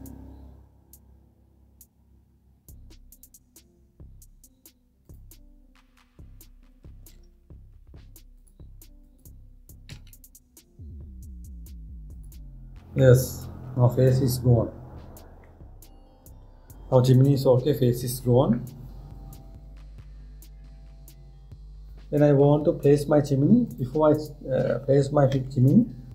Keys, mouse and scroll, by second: 7.8 ctrl+z, 9.0 click, 9.7 click, 10.5 x, 13.6-16.7 middle drag, 24.3 click, 26.0 Tab.